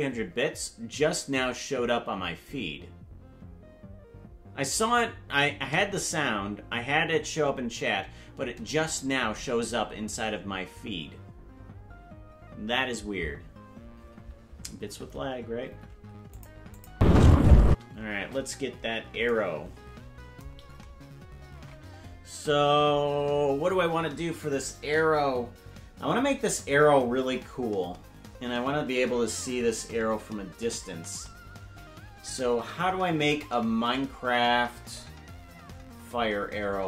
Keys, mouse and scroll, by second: 16.4 click, 16.8 click, 16.9 space, 17.7 space, 18.7 KP_Decimal, 20.5-20.9 scroll down 9, 21.5 ctrl+Tab.